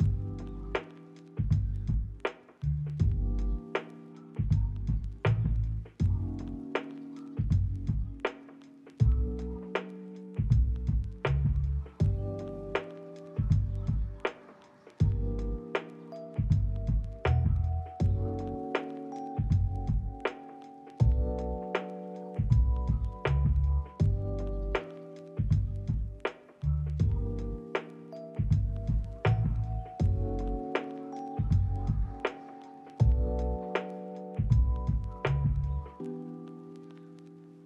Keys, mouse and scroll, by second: 1.6 double click, 2.3 middle click, 2.7 double click, 3.5 middle click, 4.1 double click, 4.9 middle click, 5.4 double click, 6.1 middle click, 8.0 shift+middle click, 8.4 double click, 10.5 double click, 11.2 ctrl+middle click, 12.3 s, 12.7 double click, 19.5 r, 20.0 ctrl+click, 20.3 g, 21.0 ctrl+click, 22.5 shift+middle click, 22.7 middle click, 23.5 double click, 23.9 ctrl+z, 24.0 ctrl+z, 25.2 double click, 26.8 middle click, 27.4 double click, 30.9 middle click, 31.3 double click, 32.6 middle click, 33.1 double click, 34.8 middle click, 35.2 ctrl+middle click, 36.1 double click, 36.7 ctrl+middle click, 37.1 middle click, 37.4 shift+middle click.